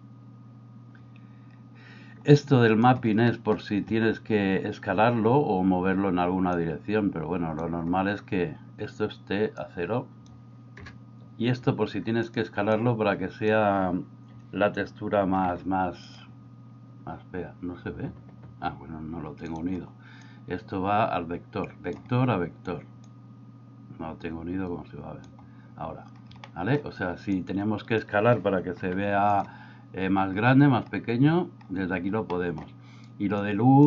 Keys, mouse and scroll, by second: 2.4 click, 3.3 middle click, 6.6-7.7 drag, 9.7-12.4 drag, 12.8-16.2 drag, 20.2-22.0 drag, 23.3-25.3 drag, 26.6 middle click, 27.4-29.3 drag, 32.4 middle click, 33.5 click.